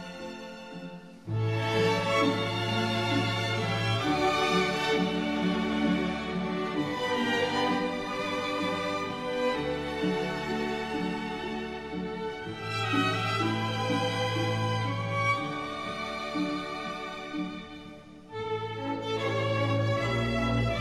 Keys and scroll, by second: 0.8 ctrl+z, 1.3 ctrl+z, 1.7 ctrl+z, 2.2 ctrl+z, 4.0 ctrl+z, 4.4 ctrl+z, 14.5 ctrl+z, 14.9 ctrl+z, 15.3 ctrl+z, 16.1 ctrl+z, 17.1 ctrl+z.